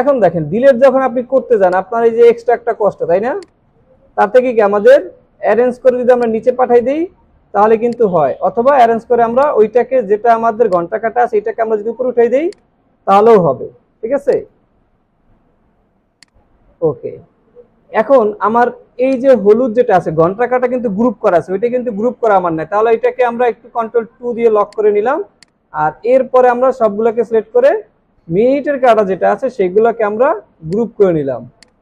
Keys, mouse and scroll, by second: 0.3 Delete, 3.9 Delete, 3.9 scroll down 1, 13.0 scroll up 1, 15.1 scroll up 1, 17.6 alt+scroll down 1, 24.0 ctrl+2, 29.9 ctrl+g.